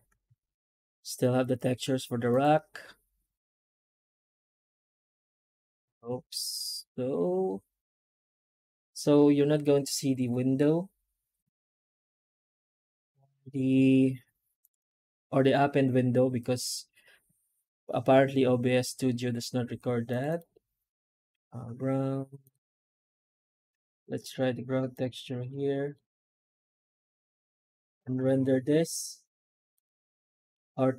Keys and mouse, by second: 23.0 click, 23.6 ctrl+space, 25.7-26.7 drag, 27.6 click, 29.7 click, 30.4-30.9 drag.